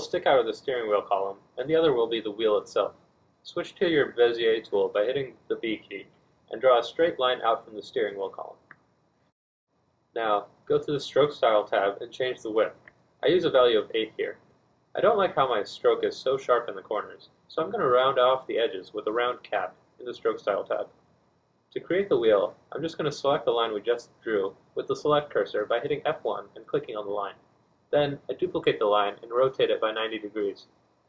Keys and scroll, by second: 11.0 d, 11.4 F2, 25.3 e, 26.8 b, 27.0 F1, 29.9 F2, 30.6 F1.